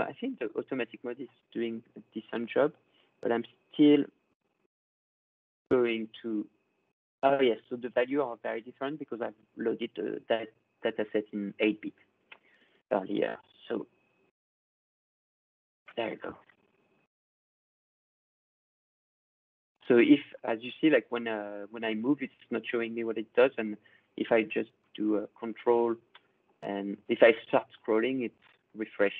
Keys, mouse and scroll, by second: 0.0 scroll, 0.8 scroll, 2.0-2.6 ctrl+scroll, 6.9 click, 9.9 click, 11.1 click, 11.1 scroll, 15.5 click, 15.5 scroll, 15.9 ctrl+middle click, 16.3 ctrl+scroll, 16.9 middle click, 17.3 middle click, 18.1 middle click, 18.3 middle click, 18.8-19.2 scroll, 21.3 scroll, 21.8 scroll down 4, 24.9-25.6 ctrl+scroll, 26.1 middle click, 26.5-27.7 scroll, 28.4 scroll, 28.9 middle click, 29.1 middle click.